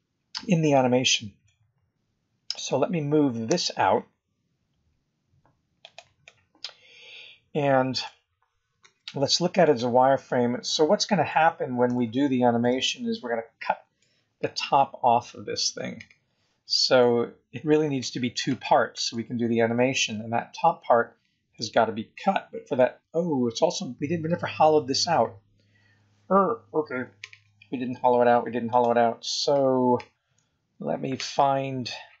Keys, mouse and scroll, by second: 0.0-0.3 scroll up 2, 0.8 scroll down 3, 1.4 middle click, 3.4 g, 6.2 middle click, 8.8 z, 10.2 middle click, 11.9 shift+middle click, 12.8 middle click, 14.7 scroll down 2, 14.8-15.9 scroll up 4, 19.1 Tab, 21.5 middle click, 23.5-24.5 scroll down 2, 28.7 click.